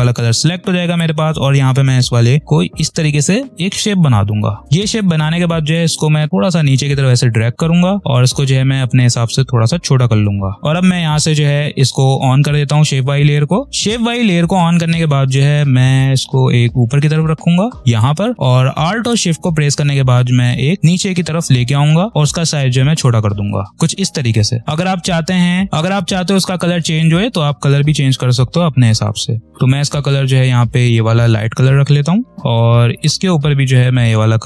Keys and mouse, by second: 4.1 click, 4.9-9.0 shift+drag, 9.0-10.6 shift+drag, 13.7 space, 15.9-22.9 drag, 22.9 shift+click, 23.7 space, 24.7 click, 25.8 space, 25.8 space, 29.4 click.